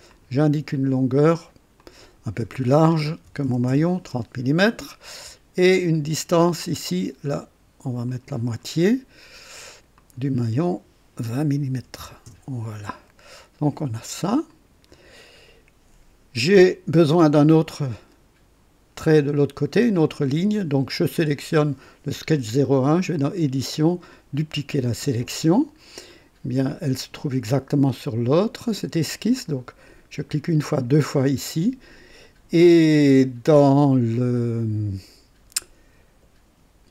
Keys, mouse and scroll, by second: 0.0 click, 1.7 click, 3.2 KP_3, 3.4 KP_0, 3.7 KP_Enter, 4.7 typing, 6.3 click, 8.0 click, 9.9 click, 11.7-12.5 typing, 12.3 KP_Enter, 14.5 click, 21.2 click, 22.9 click, 24.1 click, 26.0 click, 28.2 click, 30.7 click.